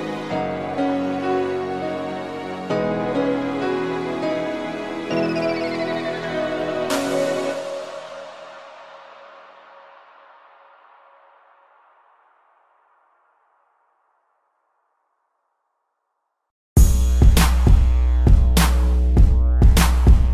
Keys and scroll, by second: 0.2 ctrl+0, 3.1 z, 7.2 ctrl+=, 8.8 space, 11.8 space, 15.0 space.